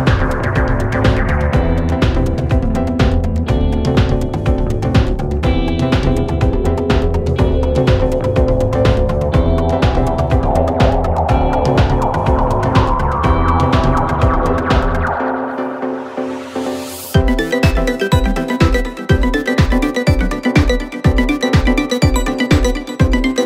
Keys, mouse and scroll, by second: 1.8 click, 2.5-4.2 scroll down 2, 4.2-7.2 drag, 8.3 click, 9.7-10.8 drag, 11.4-13.0 drag, 13.4-14.1 scroll up 4, 14.1-15.1 scroll down 2, 15.1-16.8 drag, 16.8 KP_3, 18.9-19.5 scroll up 7, 20.0-20.7 scroll down 5, 21.9-22.5 scroll down 1, 22.5-23.4 scroll down 5.